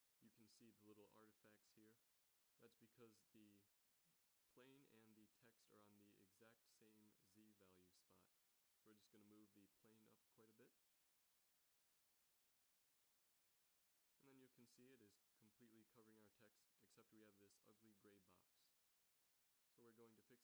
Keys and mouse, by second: 1.4-2.0 middle drag, 4.0 z, 4.1 z, 5.4 KP_3, 8.9 g, 9.6-10.5 middle drag, 12.4 middle click, 13.2 KP_7, 14.3 shift+z, 18.5 z, 18.7 z.